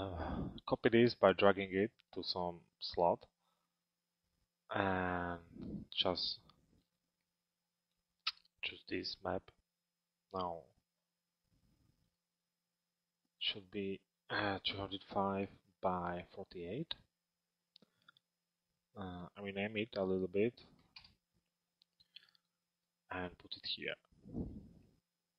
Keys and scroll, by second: 15.7 shift+Tab, 20.6 Return.